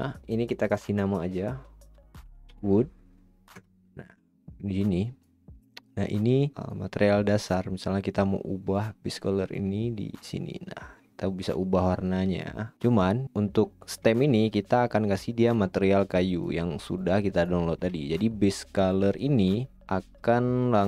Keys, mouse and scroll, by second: 4.2 o, 5.2-5.6 drag, 6.1-8.3 drag, 9.7-12.0 drag, 12.9-15.1 drag.